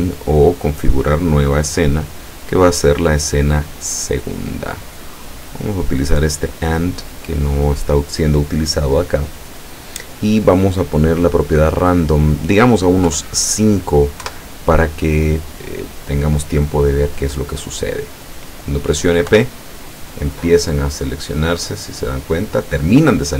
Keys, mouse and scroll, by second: 0.6 click, 2.0 click, 4.7-5.8 drag, 6.6-7.7 drag, 8.8-10.4 middle drag, 11.2 click, 12.1 click, 13.2 KP_5, 14.3 KP_Enter, 16.1-18.1 middle drag, 19.4 p.